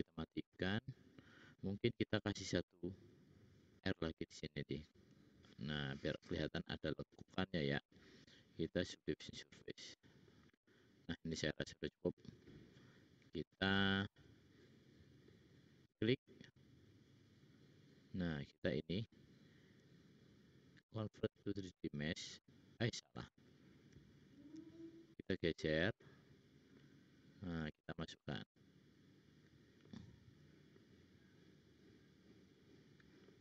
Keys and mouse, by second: 2.3 ctrl+r, 2.7 click, 4.2 g, 7.0-8.9 drag, 7.0-8.9 middle drag, 7.0-8.9 right drag, 9.1-10.4 middle drag, 14.2-15.2 drag, 14.2-15.2 middle drag, 14.2-15.2 right drag, 23.3 ctrl+z, 24.7-26.2 middle drag.